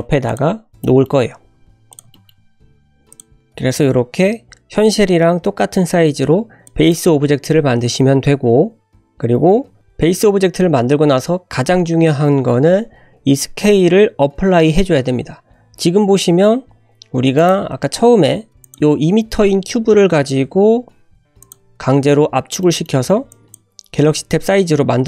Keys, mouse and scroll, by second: 0.0 g, 0.4 scroll up 1, 0.8 shift+middle click, 1.0-1.4 shift+scroll up 2, 1.5 s, 2.1 shift+middle drag, 2.5 scroll up 2, 3.1 click, 6.7 click, 17.4 click, 17.6 shift+a, 19.0 scroll down 2, 19.4 f, 19.5 x, 20.3 g, 21.8-22.4 scroll up 1, 22.6 shift+middle drag, 23.3-23.7 drag.